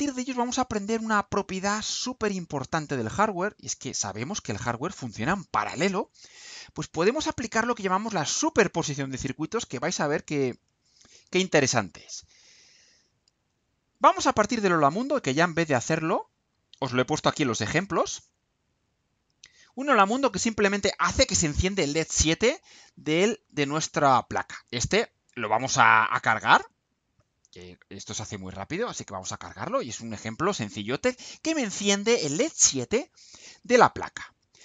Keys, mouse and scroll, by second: 18.9 click, 23.9 click, 26.4 click, 28.4-29.6 drag.